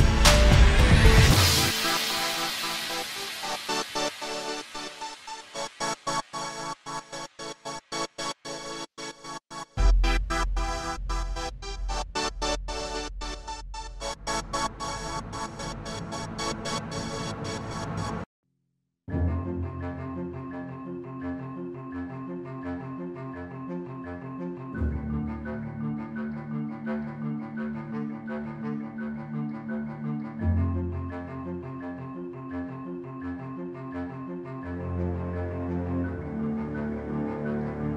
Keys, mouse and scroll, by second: 0.3 shift+middle click, 0.5 middle click, 1.5-2.5 scroll up 6, 1.8 middle click, 2.3 shift+middle click, 2.5 click, 2.9 alt+a, 2.9-3.4 scroll down 6, 3.1 middle click, 3.4 shift+middle click, 3.5-4.0 scroll up 3, 3.6 middle click, 4.0 click, 4.1 scroll down 2, 4.2 middle click, 4.4 scroll up 1, 4.7 alt+a, 5.5 click, 6.3 click, 7.6 alt+a, 7.6 scroll down 1, 7.7-8.6 scroll up 5, 7.9 shift+middle click, 8.0 middle click, 8.5 click, 8.9 click, 9.8 s, 11.2 ctrl+z, 11.4 alt+a, 11.7 shift+middle click, 11.7 scroll down 10, 11.8 scroll up 10, 12.0 click, 12.1 middle click, 12.7 click, 12.9-13.7 scroll down 5, 13.3 alt+g, 13.6 shift+middle click, 13.8 middle click, 13.8 scroll up 1, 14.1 click, 15.0 r, 16.2 middle click, 16.5 click, 16.9 scroll down 1, 17.0 middle click, 17.4 r, 19.2 shift+middle click, 19.7 click, 20.2 click, 20.8 r, 25.2 middle click, 25.6 click, 26.5 click, 27.5 click, 28.3 s, 29.1 click, 29.7-30.5 scroll up 5, 30.2 click, 31.5 alt+a, 31.5-32.0 scroll down 6, 31.7 middle click, 31.9 shift+middle click, 32.0 scroll up 1, 32.1 middle click, 32.3 scroll down 1, 32.4 middle click, 32.7 click, 33.1 click, 34.7 ctrl+z, 34.7 alt+a, 34.7 scroll down 1, 35.0 click.